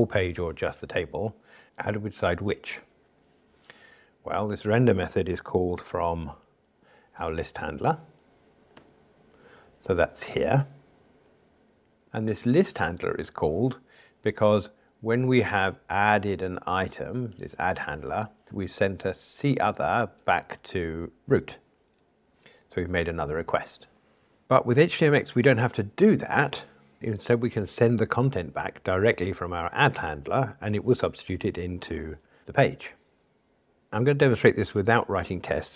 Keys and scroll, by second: 5.8 ctrl+alt+h, 6.7 Down.